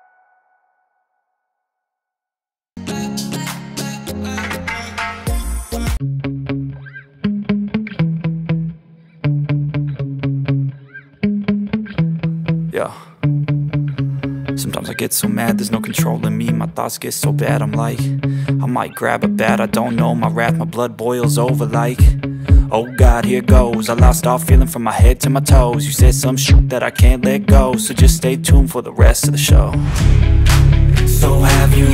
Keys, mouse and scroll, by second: 2.0 click, 4.7 ctrl+i, 7.1 click, 7.8 alt+right click, 8.7-9.7 alt+right click, 10.0-10.6 drag, 14.0 alt+right click, 14.6-15.3 click, 16.6 alt+right click, 17.5-18.1 drag, 27.1-27.7 alt+right click, 28.0-28.9 click, 28.6 alt+right click, 29.3-30.5 drag.